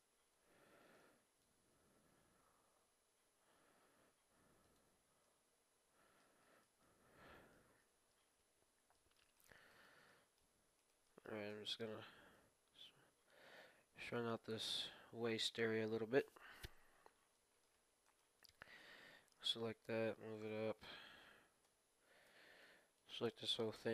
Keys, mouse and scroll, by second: 0.0 a, 0.3 b, 2.1 g, 4.9 middle click, 5.2-8.5 middle drag, 7.7 KP_1, 8.5-8.9 scroll up 1, 8.9-12.7 middle drag, 9.3-12.5 right drag, 11.4 KP_1, 12.3 g, 14.3-14.8 scroll down 1, 14.8 scroll up 1, 14.9-16.3 scroll down 1, 16.3 scroll down 1, 16.9-17.3 scroll up 1, 17.3-20.2 middle drag, 18.0-19.7 right drag, 18.7 KP_1, 19.8 g, 21.6 z, 22.2 b, 23.8 e.